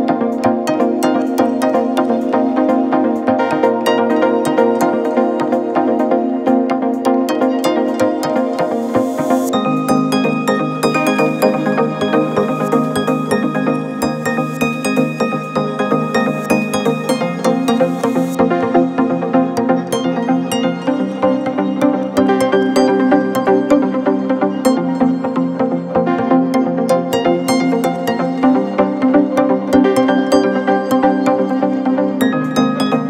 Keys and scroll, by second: 1.0 space, 3.9 space, 5.6 space, 6.5 ctrl+z, 7.4 space, 8.0 ctrl+-, 10.0 ctrl+z, 13.8 space, 16.5 space, 18.3 space, 21.8 ctrl+z, 23.9 ctrl+=, 27.1 ctrl+-, 29.1 ctrl+z, 30.6 ctrl+-, 32.4 ctrl+=.